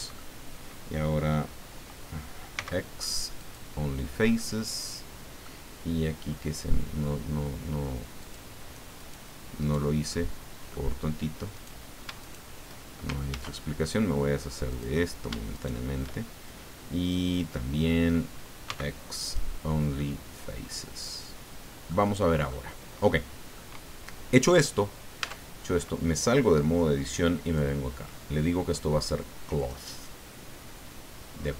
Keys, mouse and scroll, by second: 2.5 x, 3.4 click, 4.3-5.4 middle drag, 5.4 click, 8.2 click, 8.9 right click, 9.6 right click, 10.0 click, 11.5 right click, 12.2 shift+right click, 13.2 ctrl+z, 14.6 click, 15.5 shift+right click, 18.7 x, 19.2 click, 20.0-22.0 middle drag, 22.2 middle click, 23.1 click, 25.2 Tab, 27.4 click, 29.6 click.